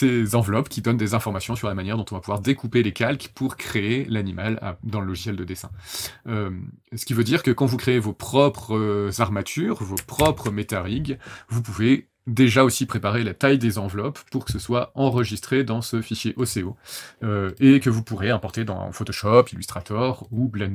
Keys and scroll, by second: 10.1 ctrl+shift+h.